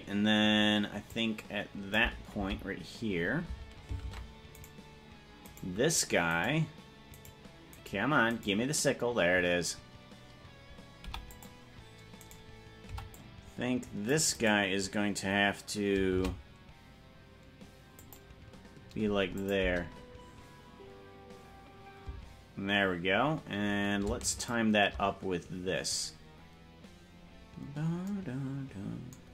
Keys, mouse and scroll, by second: 1.2 click, 2.6 Left, 4.2 ctrl+Tab, 4.8 right click, 5.8 right click, 6.6 right click, 7.4 right click, 8.0 right click, 8.6 right click, 11.2 i, 12.4 right click, 13.0 c, 16.2 shift+d, 19.5-22.4 drag, 19.8 space, 22.4 space, 24.6 shift+right click.